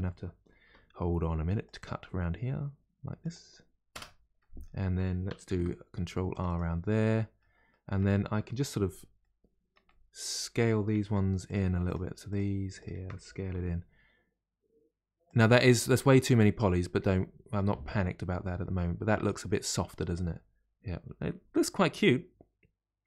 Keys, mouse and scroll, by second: 0.6 k, 4.4-5.4 middle drag, 5.4 ctrl+r, 6.8-8.7 middle drag, 8.7 scroll up 2, 9.8-11.4 middle drag, 11.4 click, 11.8 shift+click, 12.2 shift+click, 12.8 shift+click, 13.5 s, 15.6-17.5 middle drag, 17.5-17.9 scroll down 1, 17.9 middle click, 18.7-19.2 scroll down 2, 19.2 Tab, 19.4-22.5 middle drag.